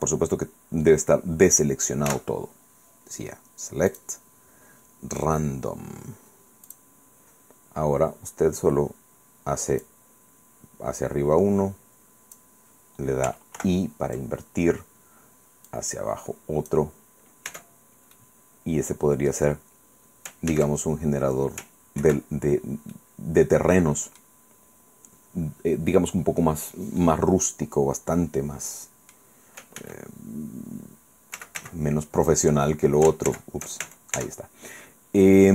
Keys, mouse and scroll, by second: 2.1 a, 3.9 click, 6.7 click, 9.9-12.6 drag, 13.6 ctrl+i, 15.7-16.9 drag, 17.5 Tab, 18.2-19.5 drag, 19.5 middle click, 19.7 scroll up 2, 20.5 ctrl+a, 22.1 ctrl+2, 22.5-22.8 ctrl+scroll down 3, 22.9-24.4 drag, 25.3-25.7 scroll up 2, 26.6 scroll down 2, 27.1-29.3 drag, 29.8 ctrl+z, 31.4 ctrl+z, 33.3 ctrl+shift+z, 33.9 ctrl+shift+Tab.